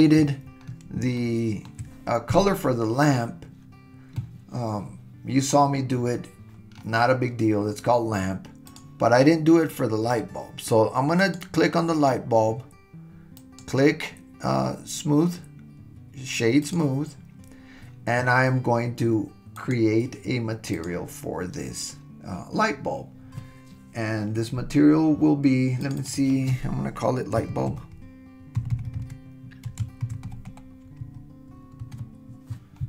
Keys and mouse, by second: 1.2-1.7 shift+middle drag, 11.2 click, 13.5-16.8 drag, 19.6 click, 20.8-21.2 drag, 25.8 click, 26.0-32.7 drag.